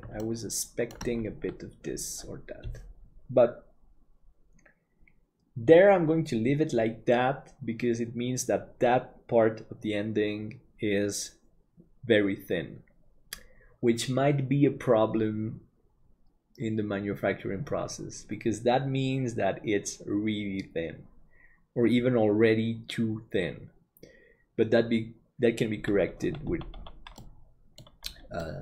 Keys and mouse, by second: 0.2 shift+middle click, 27.2 middle click, 28.4-28.6 middle drag.